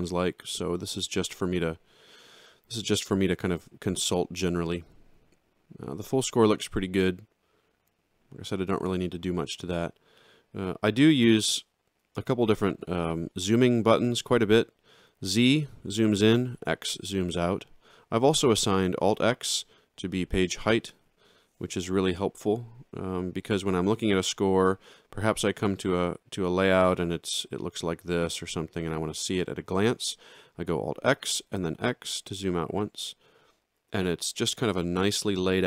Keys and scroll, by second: 20.6 alt+x, 25.5 z, 31.5 x.